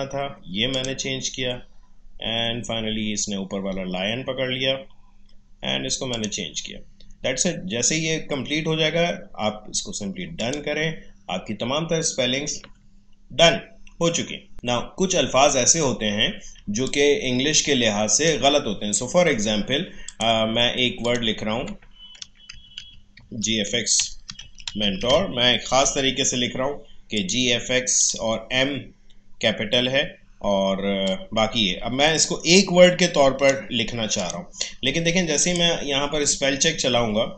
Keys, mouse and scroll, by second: 2.9 click, 6.1 click, 10.4 click, 16.5 space, 16.8 click, 17.0 space, 20.0 click, 22.3-25.6 typing, 27.1 click, 31.0-34.2 drag.